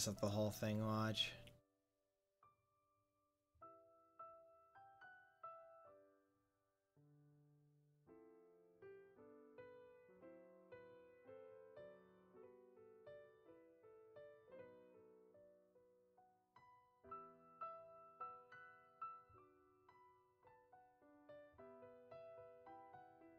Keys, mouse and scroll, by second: 18.1-21.1 drag, 21.1-22.1 middle drag, 22.5 click.